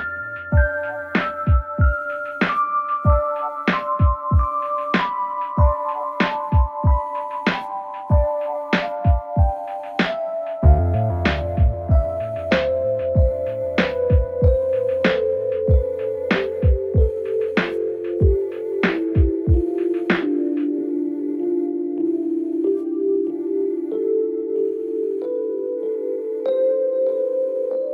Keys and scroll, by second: 6.3 ], 8.1 ], 9.7 ], 11.4 ], 13.6 ], 16.2 4.